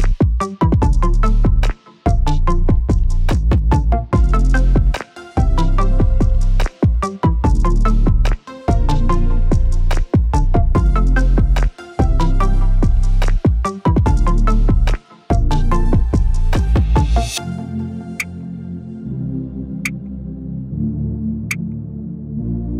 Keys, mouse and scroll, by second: 0.0 right click, 0.9 click, 2.0 right click, 2.5 click, 4.3 click, 5.5 middle click, 6.8 right click, 7.3 click, 7.9 middle click, 9.6 right click, 10.5 click, 12.6-13.3 scroll down 1, 13.3-13.6 scroll up 1, 13.7 g, 15.3 right click, 15.7 g, 17.1 right click, 17.4 g, 18.3 right click, 19.4 shift+right click, 19.8 f, 20.0 a, 20.6-21.6 middle drag, 20.6-21.6 scroll down 1, 21.6 `.